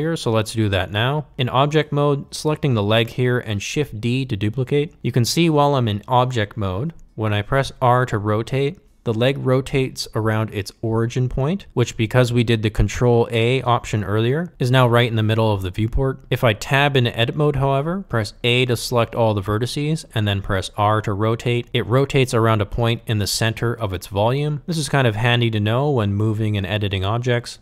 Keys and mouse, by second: 0.3 shift+d, 17.1 Tab, 18.9 a, 20.1 r, 25.7 ctrl+z, 27.4 shift+middle click.